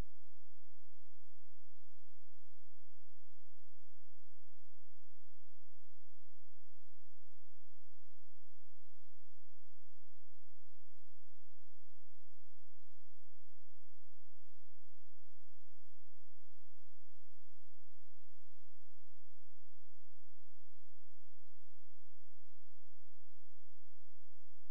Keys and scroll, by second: 21.4 ctrl+z.